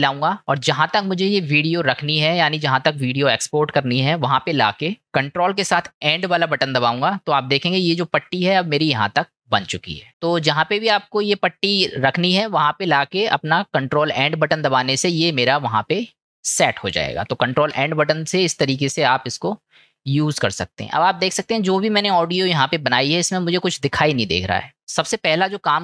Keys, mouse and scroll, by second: 6.2 ctrl+End, 10.1-13.2 drag, 17.8 ctrl+End.